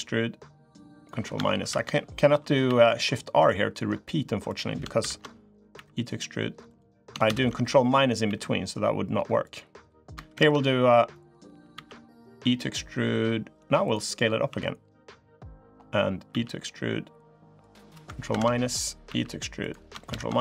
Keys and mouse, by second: 1.4 ctrl+KP_Subtract, 2.4 e, 4.8 ctrl+KP_Subtract, 5.5 e, 7.0 ctrl+KP_Subtract, 8.0 e, 10.1 ctrl+KP_Subtract, 10.9 click, 11.5 e, 14.2 s, 16.0 e, 18.1 ctrl+KP_Subtract, 18.8 e, 19.8 ctrl+KP_Subtract.